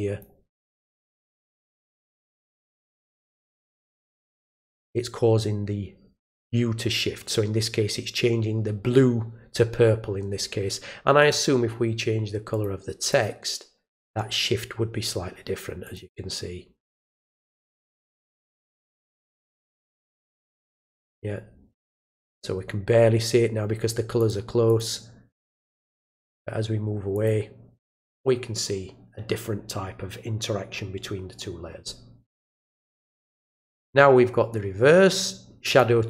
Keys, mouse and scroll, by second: 0.6 click, 1.6 click, 3.2 click, 11.2 click, 12.5 click, 13.0 click, 15.8 click, 16.8 click, 18.9 click, 19.5 click, 24.2 click, 24.7 click, 26.3 click, 27.1 click, 32.7 click, 33.6 click, 35.6 click.